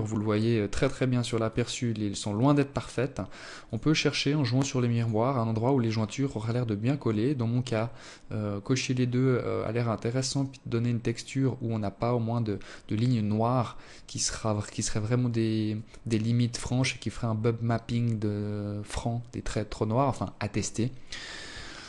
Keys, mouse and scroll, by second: 0.7 click, 1.9 click, 3.3 click, 20.2 ctrl+s.